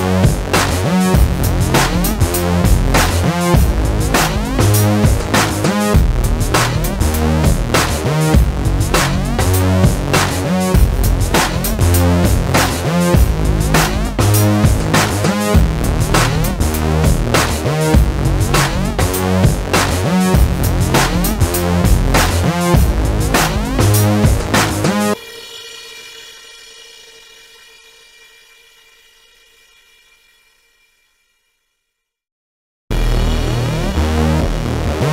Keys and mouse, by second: 0.7-3.9 typing, 5.1 j, 5.6 j, 6.1 j, 6.7 middle click, 7.1-10.8 typing, 7.9 middle click, 8.4 middle click, 10.5 middle click, 10.9 middle click, 11.7 ctrl+s, 11.9 KP_1, 19.1 ctrl+z, 20.6 middle click, 21.8 ctrl+shift+b, 22.8 middle click, 23.3 i, 24.9 alt+s, 25.7 click, 26.8 middle click, 28.4 ctrl+z, 28.5 ctrl+z, 28.7 ctrl+z, 28.8 ctrl+z, 29.1 i, 30.4 alt+s, 31.8 i, 32.9 alt+s, 34.4 ctrl+z, 34.6 i.